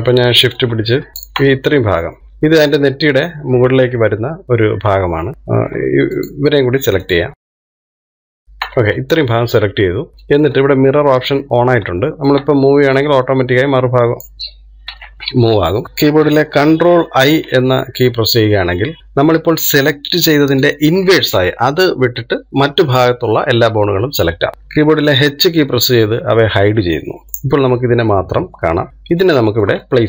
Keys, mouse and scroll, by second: 0.6 shift+click, 1.1 middle click, 1.8 shift+click, 2.5-5.3 middle drag, 6.6-7.4 scroll up 1, 7.4 shift+click, 8.0 shift+click, 8.2 shift+middle click, 9.1 shift+click, 10.2-13.2 middle drag, 13.3-14.3 shift+middle drag, 14.3 click, 15.8 scroll up 1, 15.9-18.6 shift+middle drag, 18.6 ctrl+i, 26.6 h, 28.7-30.0 middle drag.